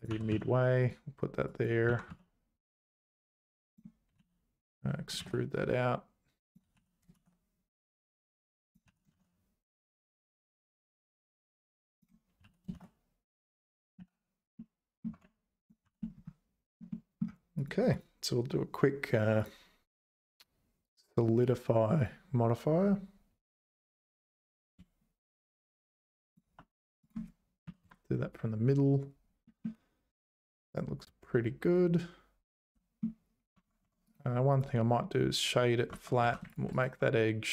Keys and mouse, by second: 0.1 g, 1.5 click, 1.9 g, 3.6 click, 4.2 e, 6.8 e, 8.9 e, 12.4 e, 14.0 z, 14.8 middle click, 15.1 Tab, 15.8 h, 16.9 middle click, 19.4-22.0 drag, 24.5-26.3 shift+drag, 27.2-28.3 drag, 29.6-33.0 middle drag, 33.5 Tab, 33.8 Tab, 34.1 right click, 35.9 Tab, 36.2 2, 36.8 right click.